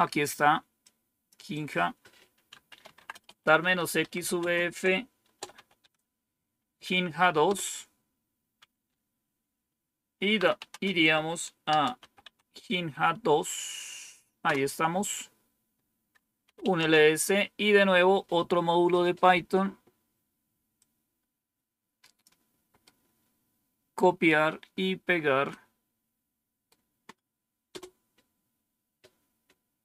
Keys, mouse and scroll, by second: 0.7 click, 1.4 click, 2.4-5.5 typing, 5.7 Tab, 7.4 Return, 10.1-11.9 typing, 12.1 Tab, 14.4 Return, 16.1-16.9 typing, 20.7-22.2 drag, 22.8-23.9 right drag, 25.4-26.6 right drag, 27.6 Return.